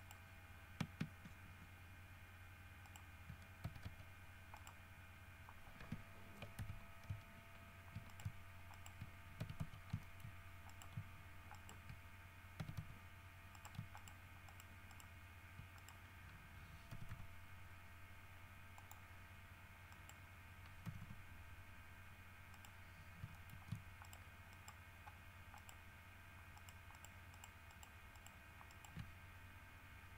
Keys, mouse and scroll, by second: 0.2 right click, 3.1 shift+right click, 3.8 w, 4.0 s, 4.7 right click, 6.8 ctrl+Caps_Lock, 8.3 shift+right click, 8.9 shift+right click, 9.6 w, 9.8 s, 10.2 shift+middle click, 10.9 shift+right click, 11.7 shift+right click, 12.8 w, 12.9 s, 13.7 shift+right click, 14.1 shift+right click, 14.7 shift+right click, 15.1 shift+right click, 15.9 shift+right click, 17.1 g, 19.0 click, 20.1 right click, 21.0 g, 22.7 right click, 23.5 shift+middle click, 24.2 shift+right click, 24.7 shift+right click, 25.8 shift+right click, 26.7 shift+right click, 27.1 shift+right click, 27.5 shift+right click, 27.9 shift+right click, 28.3 shift+right click, 28.9 shift+right click.